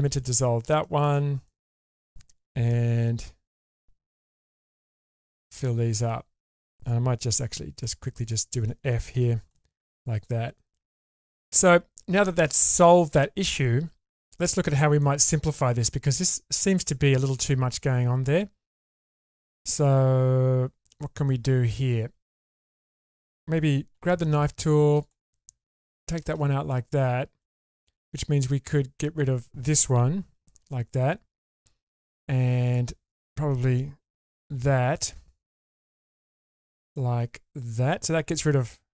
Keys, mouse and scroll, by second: 0.7 middle click, 1.0 click, 1.5 middle click, 2.0-2.7 scroll up 1, 2.7 1, 3.5 click, 4.7 4, 5.4 4, 7.3 2, 7.7 click, 8.2 shift+click, 9.2 f, 9.4 click, 9.8 middle click, 10.7 scroll down 1, 11.5 middle click, 12.7-13.6 scroll up 1, 13.6 middle click, 15.0 middle click, 15.8 scroll up 1, 17.3-18.4 middle drag, 18.8 scroll up 2, 19.1-23.3 middle drag, 23.9 k, 26.7 middle click, 28.1 alt+click, 28.7 alt+click, 30.2 ctrl+x, 30.7 middle click, 32.6 alt+click, 34.4 ctrl+x, 34.9 middle click, 35.9-36.2 scroll up 2, 36.2 middle click, 36.7-37.0 scroll down 2, 36.9-38.1 middle drag, 38.5-38.9 scroll up 1.